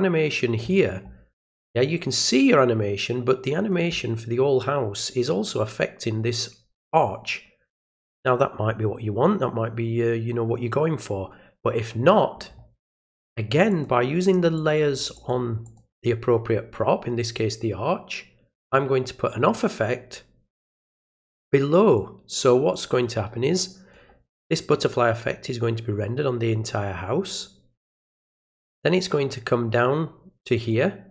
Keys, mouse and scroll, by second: 13.7 click, 14.6 click, 15.1 click, 15.6 click, 19.3-22.0 drag, 22.7 click, 23.6 click, 30.5 click.